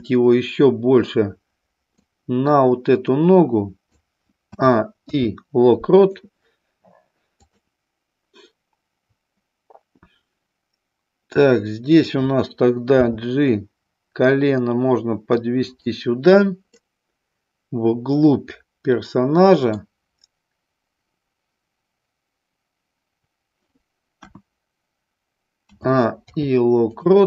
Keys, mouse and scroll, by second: 2.1-3.9 drag, 4.5 a, 4.9 i, 7.3 click, 12.0 click, 13.0 g, 15.7 click, 16.7-19.8 middle drag, 24.2 KP_1, 25.6 a, 26.3 i.